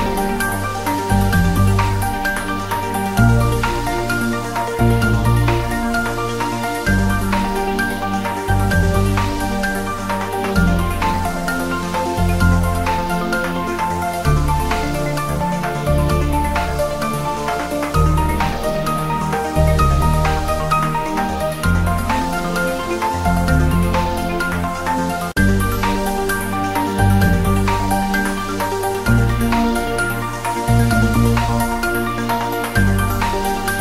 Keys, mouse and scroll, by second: 0.4 alt+shift+click, 0.8-1.1 scroll down 1, 1.5-2.7 drag, 3.0-3.4 scroll down 1, 3.6-4.1 drag, 4.2-4.5 scroll up 1, 4.8 ctrl+b, 7.1 click, 7.3 Caps_Lock, 7.7 Tab, 7.9 scroll down 1, 8.1 scroll up 1, 8.7 scroll down 1, 9.2 Tab, 10.1 click, 10.5 3, 10.8 scroll down 1, 11.2-14.3 drag, 14.8 ctrl+z, 16.0 alt+shift+click, 18.6 scroll up 1, 18.9 ctrl+b, 19.4 click, 19.6 scroll down 1, 20.2-21.6 drag, 21.6 ctrl+b, 21.9 click, 22.1 ctrl+z, 22.6 click, 22.9 ctrl+z, 23.2 scroll up 1, 23.6 ctrl+b, 24.8 click, 25.0 Tab, 25.1 scroll down 1, 25.8 click, 26.5 scroll up 1, 26.9 click, 27.4 right click, 27.6 click, 28.7 scroll down 1, 28.9 scroll up 1, 30.7 click, 30.8 scroll up 1, 31.0 click, 31.6 right click, 31.8 click, 32.5-32.8 scroll up 1.